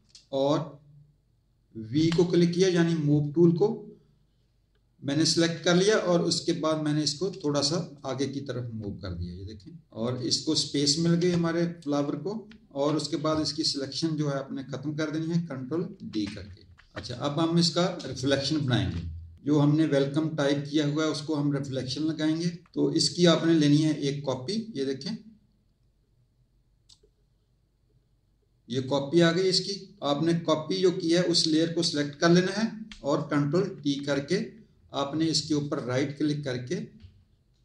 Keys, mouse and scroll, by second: 5.2 click, 7.9 click, 11.3 space, 11.4 click, 15.9 ctrl+d, 16.5 z, 17.0 click, 18.0 space, 18.1 click, 24.3 click, 28.7 click, 33.7 ctrl+t, 35.6 right click.